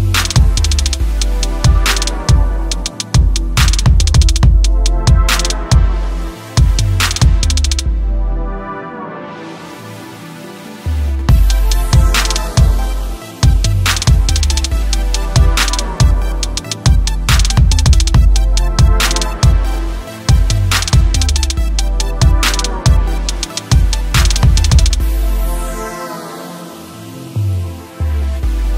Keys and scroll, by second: 6.1 ctrl+d, 6.5 ctrl+space.